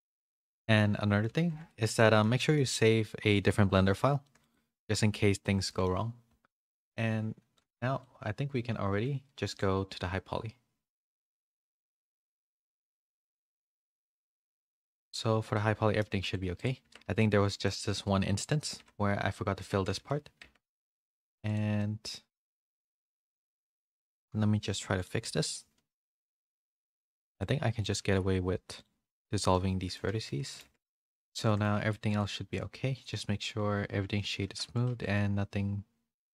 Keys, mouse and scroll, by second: 0.7 middle click, 1.6 shift+middle click, 1.6 a, 1.9 middle click, 2.4 shift+middle click, 3.3 middle click, 4.2 middle click, 4.5 middle click, 5.6 middle click, 7.5 click, 9.5 click, 12.3 click, 15.5 middle click, 15.5 a, 16.2 click, 16.5 click, 16.8 Tab, 17.1 2, 17.6 alt+click, 18.8 f, 19.6 Tab, 19.9 a, 20.4 Tab, 20.4 a, 20.7 middle click, 21.0 1, 21.7-23.0 middle drag, 24.9 Tab, 24.9 click, 25.2 /, 26.0 Tab, 26.2 1, 27.0 c, 27.9 x, 29.1 middle click, 29.8 shift+middle click, 30.0 a, 30.5 middle click, 30.5 a, 30.6 Tab, 30.8 /, 31.4 shift+middle click, 32.1 click, 33.0 middle click, 34.1 shift+middle click, 34.4 Tab, 34.6 1, 34.8 a.